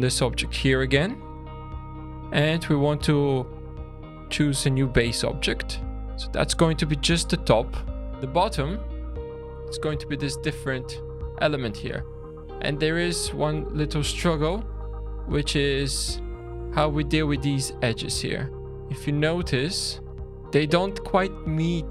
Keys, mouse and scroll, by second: 1.5 click, 3.4 click, 4.0 click, 8.1 click, 9.2 scroll up 2, 11.7-12.3 scroll up 6, 12.3-12.8 scroll down 1, 12.8 middle click, 13.6-14.1 scroll down 3, 14.4 shift+middle click, 17.1 scroll up 3, 17.7-18.2 scroll down 2, 18.2 click, 18.6 click, 19.9 click, 21.7-21.9 scroll down 4.